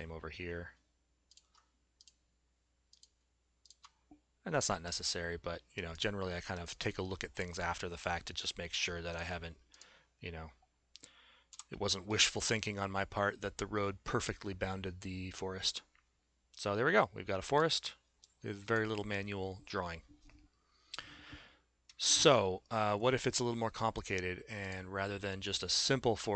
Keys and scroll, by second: 11.6 s.